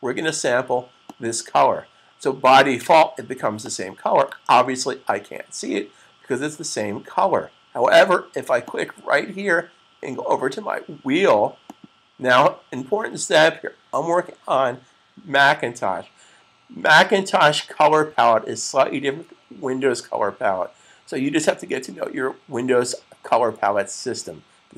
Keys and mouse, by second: 0.9 click, 3.4 click, 8.4 click, 11.5 click.